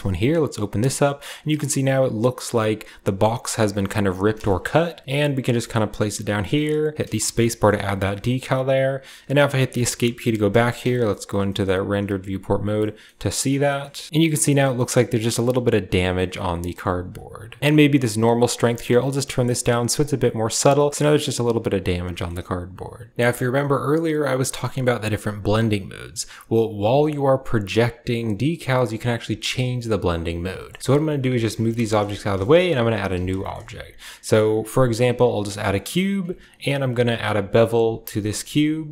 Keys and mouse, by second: 5.0 shift+click, 5.1-9.7 shift+middle drag, 9.7 click, 10.4 shift+drag, 10.7 z, 11.3 shift+drag, 12.0 a, 12.7 drag, 13.3 click, 13.6 shift+click, 13.9 click, 17.6-18.8 drag, 19.1 click, 22.0 shift+click, 29.2 shift+drag, 30.4 shift+click, 30.8 ctrl+z, 30.8 g, 30.9 shift+click, 31.7 click, 31.9 a, 32.3 shift+click, 32.9 z, 33.5 shift+a, 35.2 typing, 35.4 shift+middle click, 36.1 Tab, 36.7 ctrl+b, 38.3 Tab, 38.8 w.